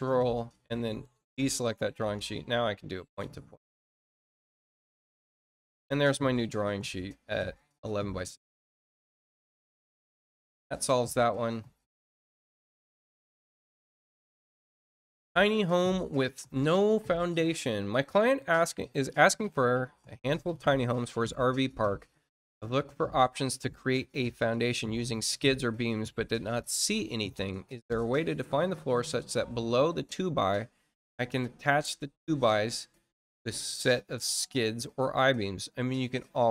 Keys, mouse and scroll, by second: 0.8-1.4 scroll down 3, 3.0 click, 4.3 click, 5.3 scroll down 1, 6.0 click, 6.4 middle click, 7.1-7.5 scroll up 1, 8.1 middle click, 8.7 scroll down 2, 12.2 click, 14.2-14.8 scroll down 4, 15.5 click, 28.0 scroll up 2.